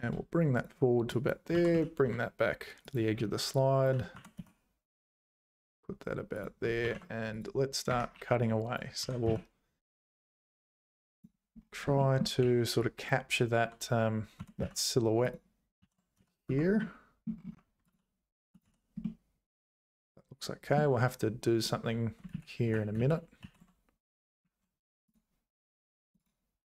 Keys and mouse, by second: 1.2 click, 1.5 g, 3.6 click, 4.2 g, 6.8 ctrl+r, 8.2 1, 8.5 click, 9.0 g, 12.1 shift+click, 12.4 1, 12.9 click, 14.4 g, 15.8 ctrl+s, 16.2 z, 16.5 Tab, 16.8 middle click, 18.4 h, 18.5 click, 18.6 h, 19.0-20.7 middle drag, 22.3 ctrl+z, 22.6 ctrl+z, 23.0 ctrl+z, 23.4 ctrl+s.